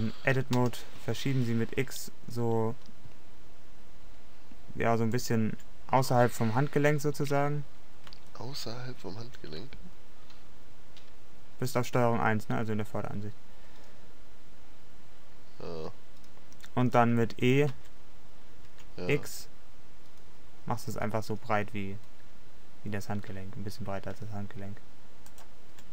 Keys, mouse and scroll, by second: 1.0 g, 5.3 click, 9.5-11.7 middle drag, 17.8 e.